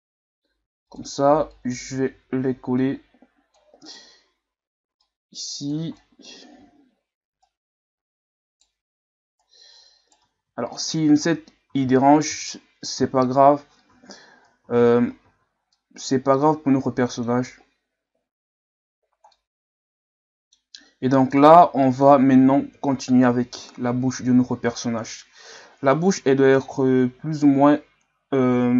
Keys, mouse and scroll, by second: 1.5-3.9 drag, 3.9 right click, 5.0 click, 5.9 middle click, 6.6 ctrl+z, 7.4 right click, 9.4 right click, 10.4 ctrl+z, 10.7 middle click, 11.2-11.7 scroll up 1, 11.7 ctrl+z, 12.3 ctrl+z, 13.0 ctrl+z, 13.9 ctrl+z, 14.6 ctrl+z, 15.3 ctrl+z, 15.7-18.8 middle drag, 19.3-22.7 middle drag, 22.7 KP_1, 23.7-24.2 scroll down 4, 25.5 KP_3, 27.1-28.2 scroll up 1.